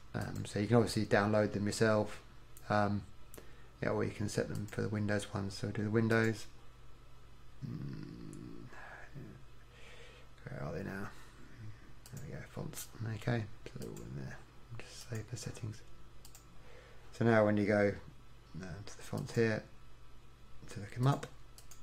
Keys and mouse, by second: 19.2-21.8 drag.